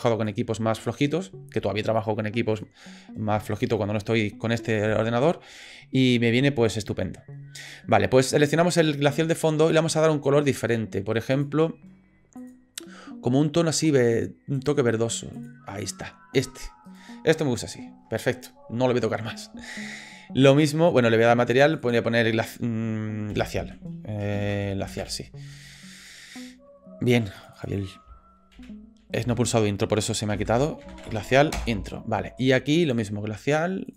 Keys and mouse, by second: 8.7 click, 11.3 click, 12.4 click, 16.9 click, 21.6 click, 21.9-26.2 drag, 27.4 click, 27.6-31.9 drag, 32.9-33.9 drag.